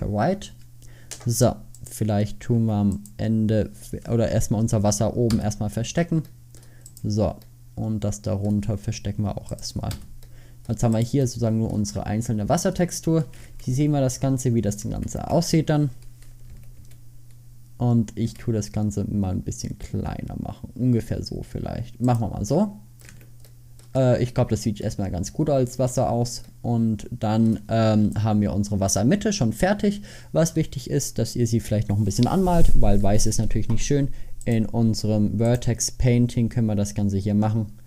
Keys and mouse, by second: 2.6 Tab, 5.8 h, 7.6 middle drag, 10.0 h, 13.8 a, 15.2 Tab, 16.6 a, 16.9 a, 18.3 s, 23.1 Tab, 26.7 middle click, 27.2 middle click, 30.8 middle click.